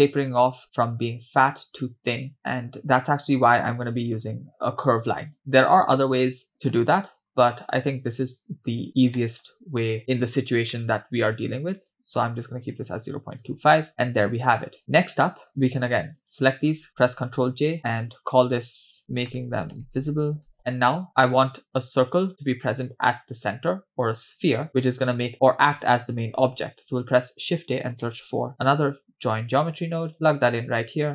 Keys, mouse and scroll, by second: 2.4 middle click, 4.5 middle click, 6.0 middle click, 7.7 click, 8.8 x, 9.2 middle click, 10.0 click, 10.7 middle click, 11.8-13.8 shift+drag, 13.9-14.7 shift+middle drag, 13.9-14.7 scroll down 2, 15.2 middle click, 15.7-16.4 drag, 17.2 ctrl+j, 18.4-20.8 drag, 20.5 BackSpace, 20.6 middle click, 26.8 shift+a.